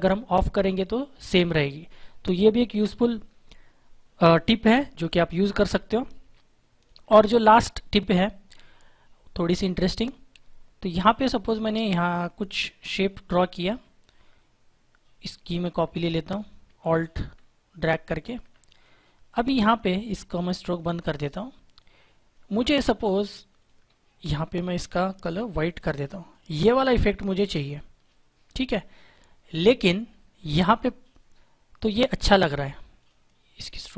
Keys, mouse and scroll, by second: 0.6 click, 6.7 click, 9.4 click, 16.4 click, 17.1 alt+click, 18.6 click, 25.7 click.